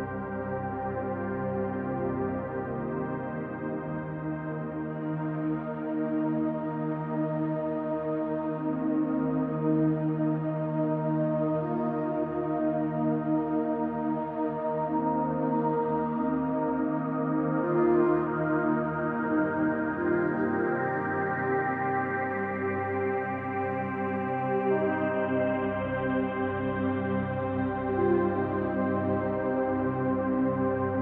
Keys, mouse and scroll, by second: 0.9 e, 2.7 click, 2.8-5.3 middle drag, 3.9-4.2 scroll up 1, 5.3-6.8 drag, 6.8 f, 7.0-8.6 drag, 8.6 f, 9.0 KP_1, 9.7 scroll down 1, 9.9 shift+middle click, 10.3 scroll up 1, 10.7 click, 11.5-16.2 shift+middle drag, 13.4 shift+d, 16.2 click, 20.5 g, 21.6 click, 21.9 e, 23.6 click, 23.8-25.8 shift+middle drag, 24.4 e, 25.8 click, 26.2 e, 27.3 click, 27.6-29.3 shift+middle drag, 28.1 e, 29.3 click, 29.7 e.